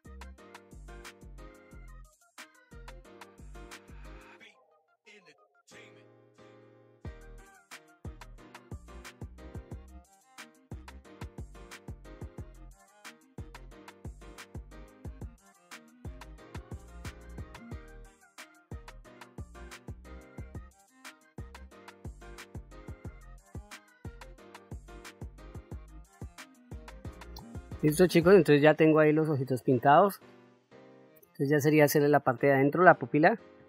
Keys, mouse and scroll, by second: 1.0 ctrl+z, 1.2-2.7 drag, 2.8 click, 3.3 middle click, 3.6 click, 4.2 click, 4.9 middle click, 5.0 click, 5.5 click, 6.0 middle click, 6.1 click, 6.3 click, 6.6 middle click, 6.9 click, 7.1 click, 7.4 middle click, 7.5 click, 7.7 click, 7.8 ctrl+middle click, 8.1 click, 9.1 middle click, 9.2 click, 9.4 click, 10.1 click, 10.2 click, 10.5 middle click, 10.6 click, 11.1 click, 11.4 click, 11.6 middle click, 12.1 click, 12.3 click, 12.6 click, 12.8 click, 13.1 middle click, 13.4 shift+middle click, 13.9 ctrl+middle click, 14.1 shift+middle click, 14.3 click, 14.5 click, 14.7 middle click, 14.9 click, 15.6 click, 15.8 click, 16.1 click, 16.5 click, 17.0 click, 17.1 f, 17.2 click, 17.8 click, 18.3 click, 18.7 middle click, 18.8 click, 19.1 click, 19.3 middle click, 19.6 click, 20.4 click, 20.8 shift+middle click, 21.0 click, 21.6 shift+middle click, 21.7 click, 21.9 middle click, 22.1 f, 22.3 click, 22.6 click, 22.9 click, 23.3 middle click, 23.7 click, 24.0 middle click, 24.2 middle click, 24.3 click, 24.6 click, 24.9 click, 25.0 ctrl+middle click, 25.1 ctrl+shift+middle click, 25.6 click, 26.2 ctrl+middle click, 26.6 ctrl+s, 27.7-29.6 middle drag, 29.8 middle click, 31.7 middle click.